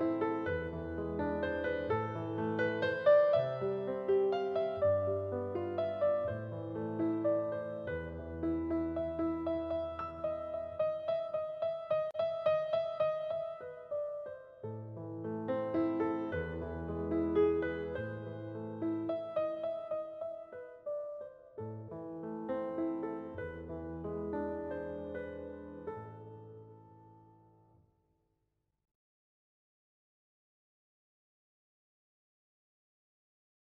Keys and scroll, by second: 21.2 space, 25.0 space, 27.5 space, 29.2 space.